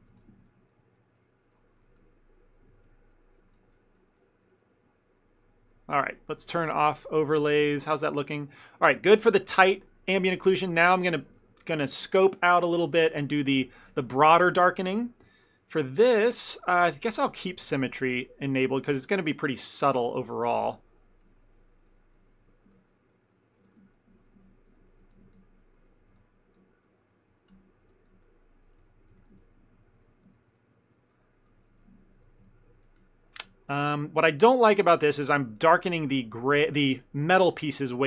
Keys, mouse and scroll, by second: 0.2 f, 0.6 ctrl+click, 0.8 ctrl+click, 1.2 ctrl+click, 1.6 ctrl+click, 1.9 ctrl+click, 2.1 ctrl+click, 2.3 middle click, 2.9 ctrl+click, 3.6 ctrl+click, 4.3 ctrl+click, 4.6 ctrl+middle click, 4.8 middle click, 5.0 middle click, 5.2 ctrl+middle click, 7.0 click, 7.4 ctrl+middle click, 7.6 middle click, 8.0 ctrl+middle click, 8.2 shift+middle click, 9.1 ctrl+middle click, 9.3 ctrl+middle click, 9.7 f, 10.0 middle click, 10.6 f, 11.5 f, 13.5 shift+middle click, 13.9 f, 14.2 ctrl+middle click, 15.1 f, 15.4 shift+middle click, 15.7 middle click, 17.7 f, 18.0 ctrl+click, 18.5 ctrl+click, 18.7 ctrl+click, 18.9 ctrl+click, 19.2 ctrl+click, 19.5 middle click, 20.3 ctrl+click, 20.5 ctrl+click, 20.8 middle click, 21.3 ctrl+click, 21.6 ctrl+click, 22.5 ctrl+click, 22.8 ctrl+click, 23.4 ctrl+click, 23.7 f, 24.0 ctrl+click, 24.3 ctrl+click, 25.1 f, 25.4 ctrl+click, 25.9 middle click, 26.3 ctrl+click, 26.4 ctrl+click, 26.6 ctrl+click, 26.7 ctrl+click, 27.0 ctrl+click, 27.2 ctrl+click, 27.4 shift+middle click, 28.0 ctrl+click, 28.2 ctrl+click, 28.4 ctrl+click, 28.8 f, 29.2 f, 29.5 ctrl+click, 29.7 ctrl+click, 30.1 middle click, 30.6 ctrl+middle click, 31.0 ctrl+click, 31.2 ctrl+click, 31.7 ctrl+click, 31.9 ctrl+click, 32.3 shift+middle click, 32.4 shift+middle click, 32.5 ctrl+middle click, 32.9 ctrl+click, 33.1 ctrl+click, 33.4 ctrl+middle click, 33.6 ctrl+middle click, 34.4 shift+middle click, 34.9 shift+middle click, 35.1 shift+middle click, 37.8-38.0 ctrl+z.